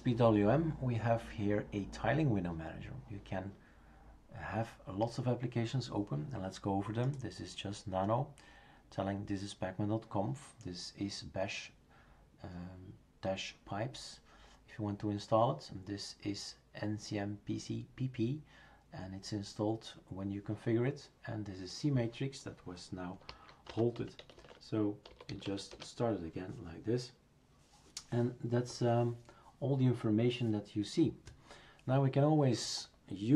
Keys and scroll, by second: 23.3-25.9 typing.